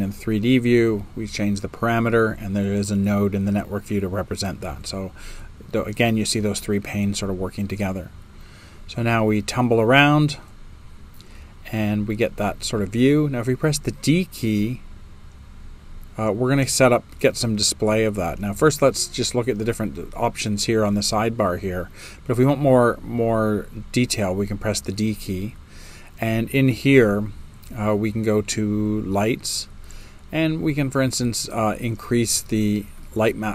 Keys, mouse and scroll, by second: 2.1-3.7 drag, 2.1 space, 4.3 right click, 4.3 space, 5.7 middle click, 5.7 space, 6.7-9.9 right drag, 6.7 space, 24.4 d.